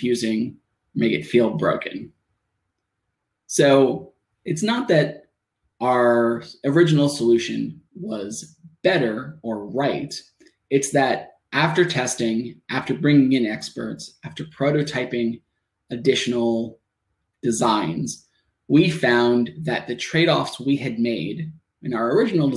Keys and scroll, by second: 1.7 Tab, 5.3 Return, 6.3 Tab, 8.4 Tab, 10.7 shift+Tab, 17.0 Return, 17.9 Tab, 22.1 shift+Tab.